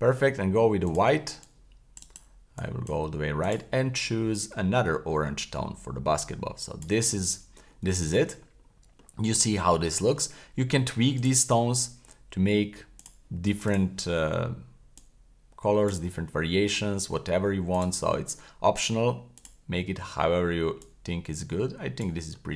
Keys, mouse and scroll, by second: 0.8 click, 1.4-2.0 drag, 2.6-2.9 drag, 3.4 click, 7.2-7.9 scroll up 3, 8.0 shift+middle click, 8.5-8.8 scroll up 1, 8.9-9.6 scroll down 3, 9.6-10.2 middle drag, 11.2 click, 13.0 click, 13.6 click, 16.2 scroll up 3, 17.7 click, 19.4 click, 22.2-22.5 scroll down 2.